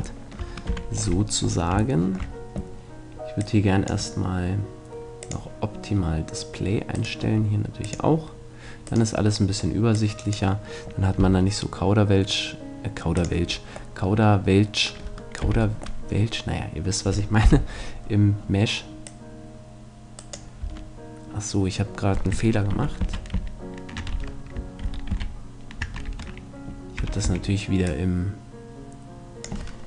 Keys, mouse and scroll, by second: 0.1-1.7 middle drag, 0.7 z, 2.0-3.8 middle drag, 3.4-7.0 drag, 5.2-6.6 middle drag, 7.0-8.6 right drag, 7.8-9.6 drag, 9.4-10.6 right drag, 10.1-11.8 drag, 11.2 g, 13.5-15.2 middle drag, 15.4 z, 15.9-17.4 middle drag, 17.4 KP_1, 19.0 click, 20.6 Tab, 22.7 ctrl+z, 23.0 ctrl+z, 23.4 ctrl+z, 24.1 Tab, 24.8 ctrl+z, 25.1 ctrl+z, 26.1 Tab, 27.0 a, 27.2 a, 27.8-29.6 drag.